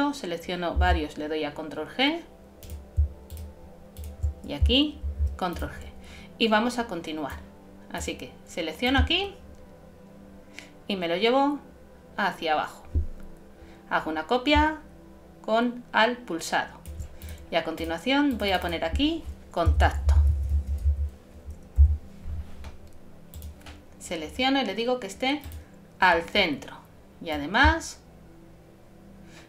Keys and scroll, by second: 0.8 super+g, 5.0 shift+super+g, 19.8 shift+c, 20.1 shift+o.